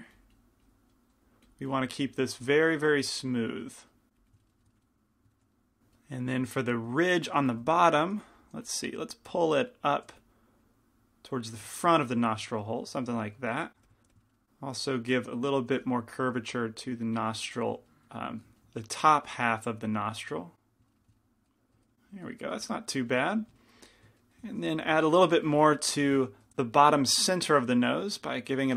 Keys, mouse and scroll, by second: 1.1 middle click, 1.2-3.0 middle drag, 3.6-4.6 middle drag, 5.1-6.4 middle drag, 6.5 middle click, 7.6 f, 8.3 f, 8.7 f, 9.3-11.6 drag, 10.2 f, 11.8 click, 13.8 f, 14.1 f, 15.0-19.3 drag, 15.8 f, 18.4 f, 19.3-20.6 middle drag, 20.6 click, 21.1-23.0 middle drag, 25.5 i, 25.5 f, 26.1 f, 26.5 f, 28.1-28.7 drag.